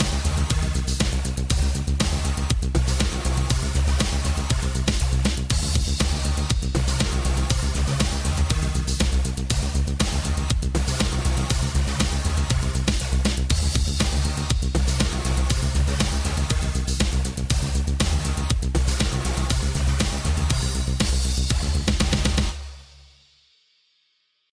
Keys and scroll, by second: 4.2 space, 11.3 space, 21.9 space.